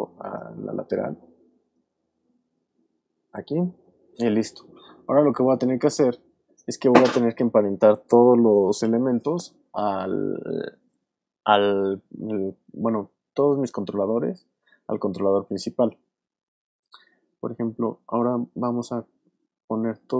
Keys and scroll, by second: 0.6 alt+space, 1.3 alt+space, 2.2 space.